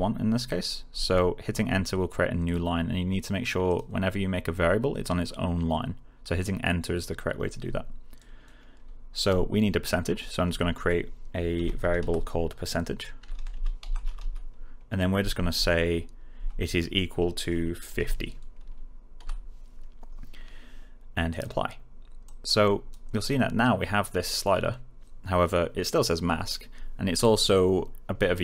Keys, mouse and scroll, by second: 3.6 click, 10.4-15.1 typing, 16.3 space, 17.6-18.4 typing, 21.2 click.